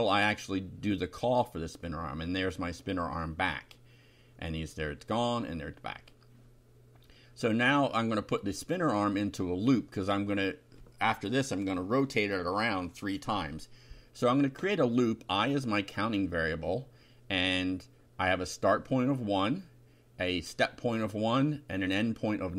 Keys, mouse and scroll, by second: 0.7-2.0 typing, 2.3 F5, 3.8 Home, 4.5 /, 4.8 F5, 5.6 Home, 5.9 Delete, 6.7 F5, 7.1 Down, 7.4 Delete, 7.8 Up, 8.6 Return, 9.2 Up, 10.6 Down, 10.9 Tab, 11.2 Up, 11.9-14.9 typing, 16.4 [, 16.9 BackSpace, 19.1-22.5 typing.